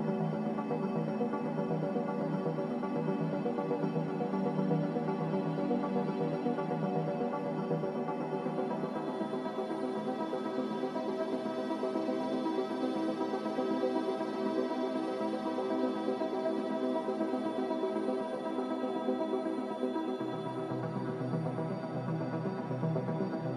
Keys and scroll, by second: 17.6-18.0 typing, 19.6-20.3 typing, 22.8 1, 22.8 5.